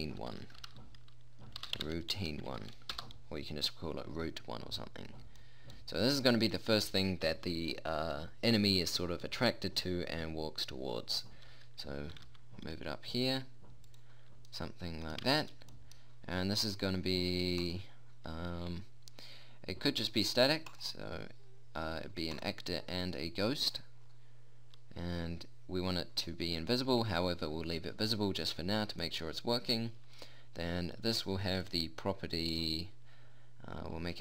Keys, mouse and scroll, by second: 6.0 middle click, 12.6 g, 14.0 click, 18.1-31.6 drag, 32.1-34.2 drag.